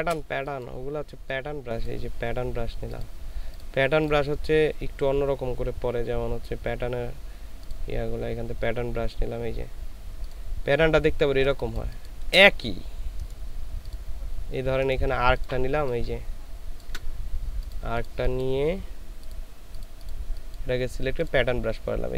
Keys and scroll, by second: 11.6 space.